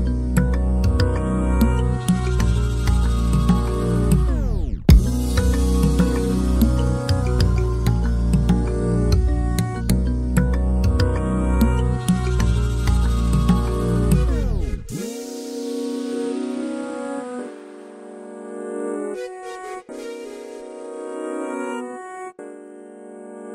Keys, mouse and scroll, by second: 1.7 scroll down 2, 2.1 shift+middle click, 2.6 scroll up 1, 2.8-4.5 middle drag, 4.5 alt+d, 9.4 alt+a, 12.9 ctrl+alt+b, 15.5 F12.